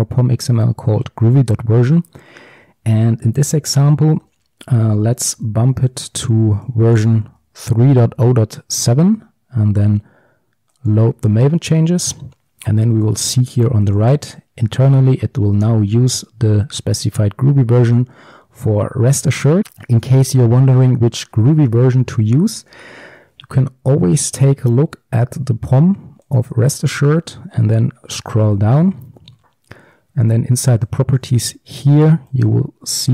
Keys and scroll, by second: 6.6 ctrl+d, 7.4 ctrl+x, 11.0 ctrl+shift+super+o.